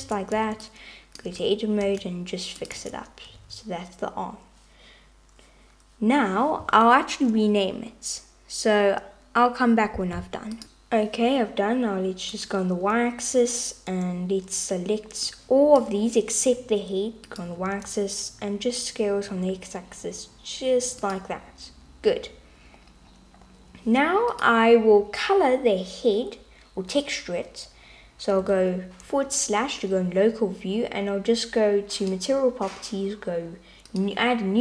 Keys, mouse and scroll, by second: 0.0 Tab, 0.4 alt+z, 0.7 click, 1.9 g, 2.9 Tab, 3.6 alt+z, 12.4-14.2 drag, 15.3 click, 17.3 click, 17.7 s, 24.3-28.5 drag, 32.0-34.6 drag.